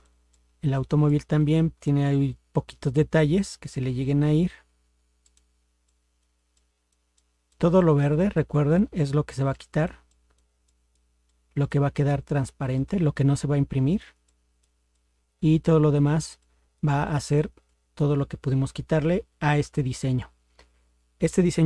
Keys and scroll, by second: 19.6 ctrl+0.